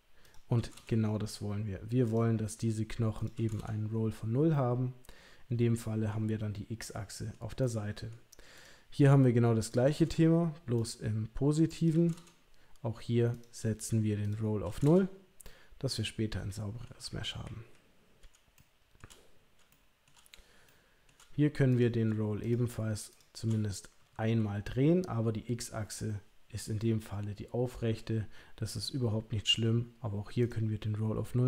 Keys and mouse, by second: 0.4 click, 2.1 click, 3.1 click, 4.5-6.1 middle drag, 6.8 middle click, 7.6 middle click, 8.5 click, 9.6 click, 10.8 click, 11.7 click, 13.3 click, 14.2 click, 15.4-16.8 middle drag, 17.0 KP_3, 17.4 KP_1, 18.5 shift+middle click, 19.7 shift+middle click, 20.6 shift+middle click, 21.7 click, 30.4 click.